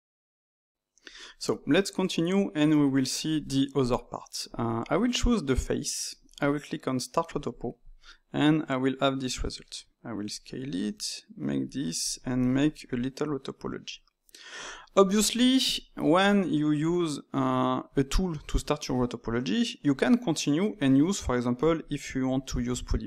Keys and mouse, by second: 4.5-9.3 drag, 9.5 s, 11.9 click, 12.2 shift+click, 12.5 middle click, 13.0 ctrl+right click, 13.4 ctrl+right click, 13.9 ctrl+right click, 14.4-17.7 shift+middle drag, 21.7 click, 22.4 ctrl+middle click.